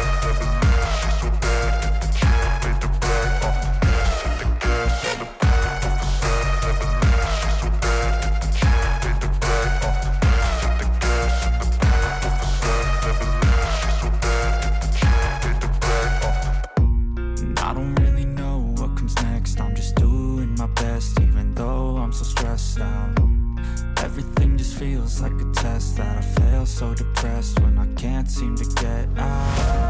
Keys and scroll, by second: 2.8 ctrl+g, 22.5 ctrl+d.